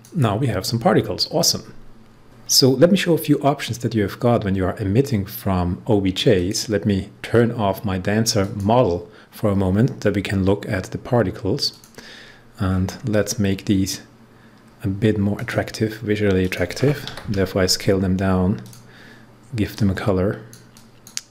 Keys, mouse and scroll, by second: 6.3 click, 11.6 click, 12.6 scroll down 1, 15.3 click, 17.0 2, 18.5 click.